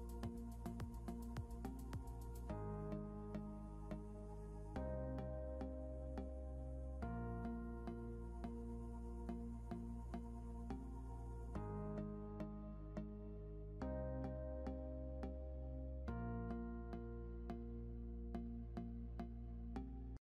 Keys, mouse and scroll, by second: 0.1 scroll down 1, 2.7 scroll up 1, 3.8-4.4 scroll up 1, 5.4 scroll down 1, 11.4 scroll down 1, 17.3 scroll up 1.